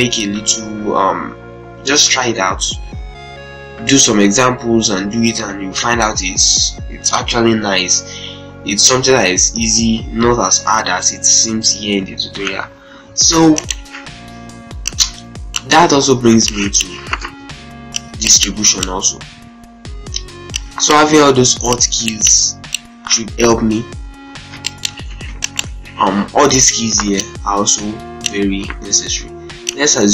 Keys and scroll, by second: 12.3 c, 12.4 e, 16.1 z, 17.0 ctrl+space, 23.6 ctrl+r, 24.3 ctrl+z, 24.8 ctrl+space, 25.7 ctrl+space.